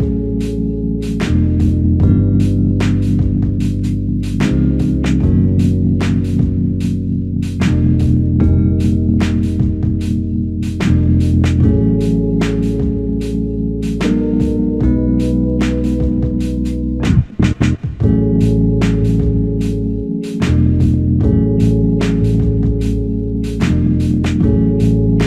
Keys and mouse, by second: 0.0 double click, 4.2 alt+click, 5.7 double click, 8.5 double click, 12.0 alt+click, 13.4 alt+click, 15.9 double click, 17.2 alt+click, 18.6 double click, 21.1 alt+click, 23.1 double click, 23.6 alt+click, 24.8 double click.